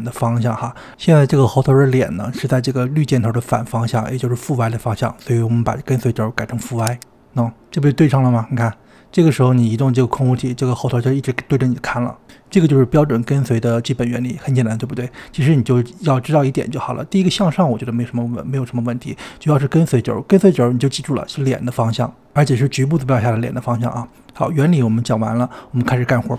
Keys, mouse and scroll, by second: 0.8 click, 3.1 click, 6.8 click, 7.8 click, 8.8 g, 12.7 drag, 15.9-17.5 middle drag, 17.5 click.